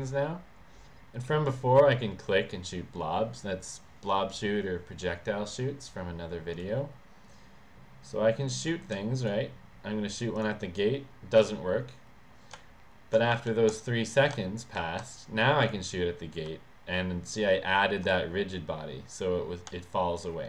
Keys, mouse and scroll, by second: 6.5 click, 8.8 s, 9.2 click, 10.5 click, 12.6-14.9 typing, 15.7 click, 16.5 w, 19.7 s.